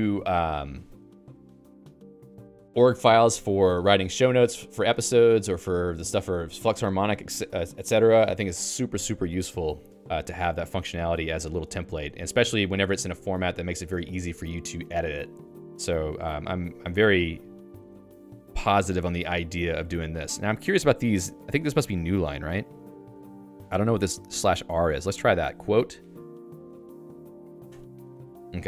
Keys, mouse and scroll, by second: 9.3-11.5 typing, 15.3 BackSpace, 25.3 BackSpace, 26.8-27.6 typing, 27.8 Return.